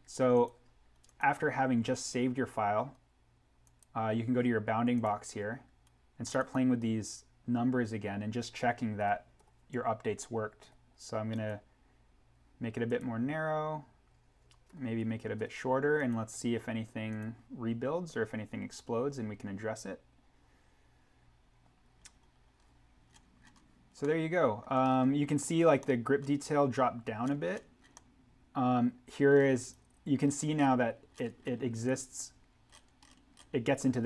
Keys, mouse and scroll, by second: 0.3 click, 3.7 click, 11.3 click, 14.6 8, 15.9 click, 22.0-23.0 scroll down 1, 24.0 middle click, 24.2-24.9 scroll, 25.8 middle click, 27.2 scroll down 1, 27.9 middle click, 28.2-28.6 scroll, 28.9-29.5 scroll, 29.5 click, 30.2-31.1 scroll up 1, 31.7 click, 32.6-33.1 scroll up 1.